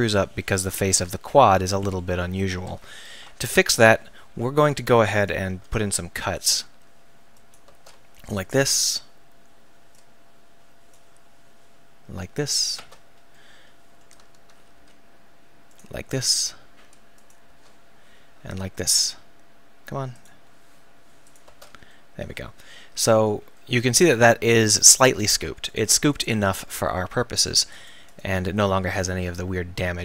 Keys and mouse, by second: 5.2-7.7 drag, 5.5 k, 11.9 k, 13.5-17.5 middle drag, 14.8 k, 18.5 k, 25.7-26.7 right drag, 26.7-29.0 middle drag.